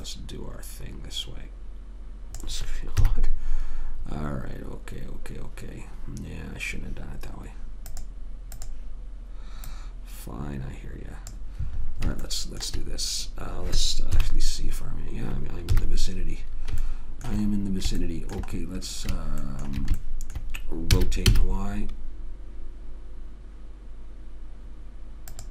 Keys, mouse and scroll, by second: 0.3 click, 3.3 KP_1, 8.3-10.8 drag, 14.5 KP_3, 16.1 KP_1, 17.2 middle click, 17.4 middle click, 21.3 r.